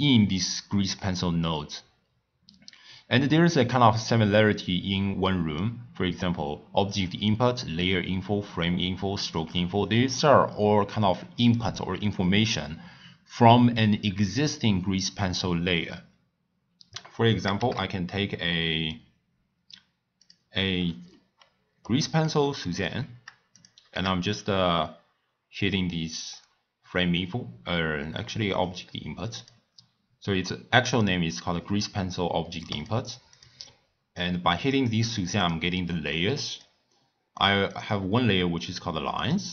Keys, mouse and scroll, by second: 17.5 shift+a, 20.7 scroll up 1, 20.7 scroll down 2, 20.7-21.3 scroll up 8, 21.3 scroll down 2, 21.4-21.8 scroll up 1, 21.8-22.3 middle drag, 22.3 scroll up 1, 22.4 scroll down 3, 22.7-23.0 scroll up 5, 23.0-23.5 scroll down 1, 23.5 click, 23.9 shift+a, 32.7-33.4 drag, 35.4 click, 36.5 click, 37.3 click, 37.7 click, 39.2 click.